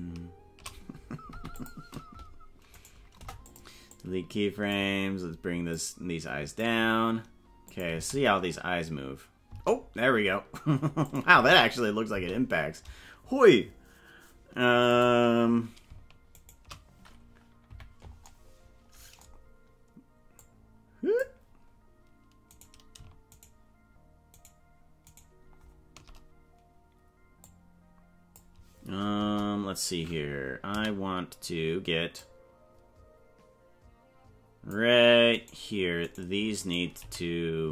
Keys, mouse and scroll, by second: 0.2 shift+right click, 2.7 right click, 3.2 Delete, 3.9 click, 5.8 click, 7.6 click, 7.9 space, 9.6 space, 11.0 click, 11.3 space, 12.2 space, 15.4 right click, 16.7 shift+right click, 17.6 KP_Decimal, 20.3 click, 21.4 scroll down 4, 22.9 right click, 23.7 shift+right click, 24.6 shift+right click, 25.6 shift+right click, 27.4-28.4 drag, 29.1 KP_0, 30.7 a, 32.2-34.8 drag, 35.3 right click, 36.0 right click, 36.6 right click, 37.0 g.